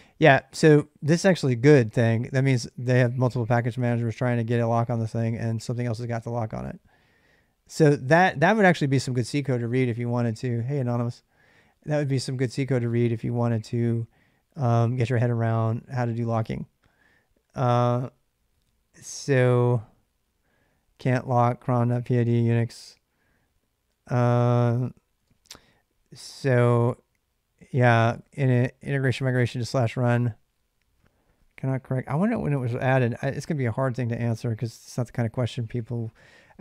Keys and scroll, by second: 22.6-23.7 typing, 25.0 typing, 33.0 space, 36.5 space.